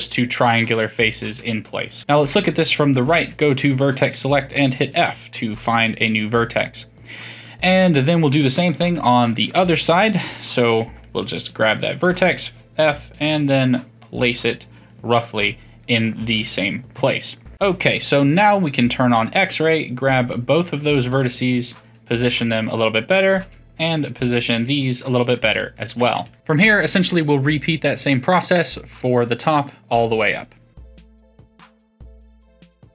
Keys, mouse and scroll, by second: 0.0-2.0 middle drag, 2.0 KP_3, 3.1 1, 3.6 click, 4.5 f, 7.9-9.4 middle drag, 9.4 ctrl+KP_3, 10.9 click, 12.0 f, 16.9 KP_3, 18.6 click, 20.7 g, 22.8 click, 23.4 g, 25.8 2, 26.3-27.1 middle drag, 27.1 2, 27.8 click, 28.4 shift+click, 28.9 shift+click, 29.3 shift+click, 29.8 shift+click, 30.3 shift+click, 31.0 middle click, 31.0 click, 31.3-32.9 typing, 31.4 click, 31.7 middle click, 32.0 shift+middle click, 32.8 middle click.